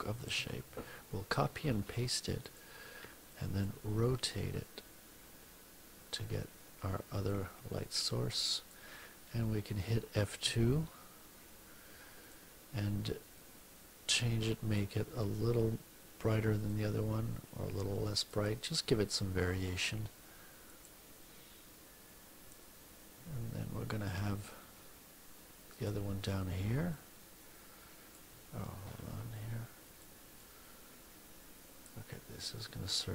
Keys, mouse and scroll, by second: 0.2 ctrl+c, 1.4 ctrl+alt+v, 2.4 click, 3.6-8.8 ctrl+drag, 10.4 F2, 11.6 middle click, 12.2 click, 13.3-14.8 drag, 16.6-18.4 drag, 20.6 click, 23.0 F1, 25.6 click, 26.8-28.2 drag, 28.8 ctrl+z, 29.8 click, 30.3-32.0 drag, 32.6 ctrl+z.